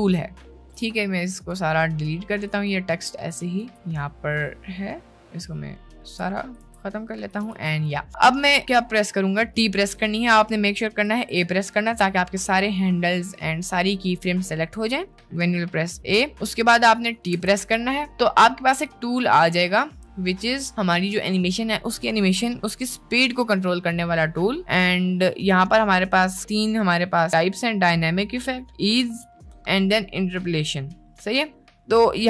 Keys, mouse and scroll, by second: 1.2 ctrl+click, 2.5 t, 3.2 click, 3.6 t, 3.7-6.3 ctrl+drag, 6.6 t, 7.3 click, 7.5 t, 9.7 right click, 11.4 click, 11.4 a, 11.8 a, 15.9 a, 16.7 middle click, 17.3 t.